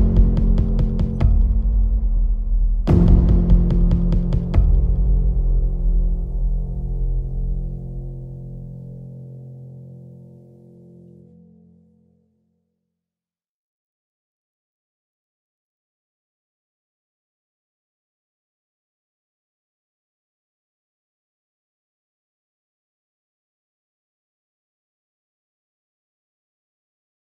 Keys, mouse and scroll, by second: 0.3-3.9 shift+middle drag, 3.9-17.4 drag, 22.2 click, 23.4 Delete, 24.3 click, 25.6 click, 26.4 click.